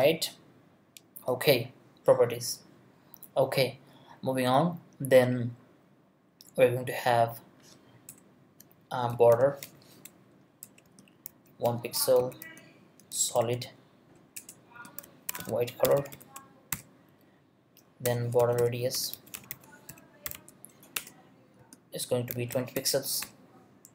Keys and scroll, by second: 8.1 Return, 14.7-23.7 typing, 18.0 Return, 20.9 Return.